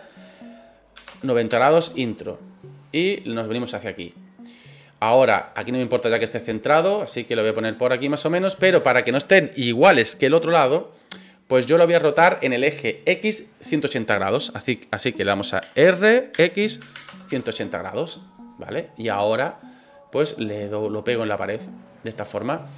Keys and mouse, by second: 0.9 KP_9, 1.1 KP_0, 1.5 KP_Enter, 3.1-4.8 drag, 5.3 click, 6.2 middle click, 7.3 click, 15.7-17.1 typing, 17.3 KP_Enter, 18.9 click, 19.7-20.1 middle drag, 20.7-22.1 drag, 22.3 middle click.